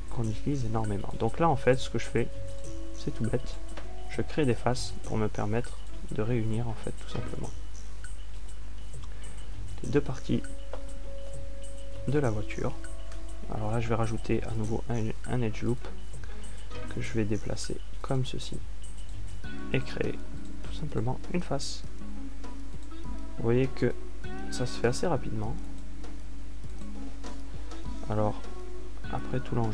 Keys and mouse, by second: 6.0 f, 12.5 a, 15.5 ctrl+r, 18.4 g, 23.2 f, 25.6 click, 29.6 g.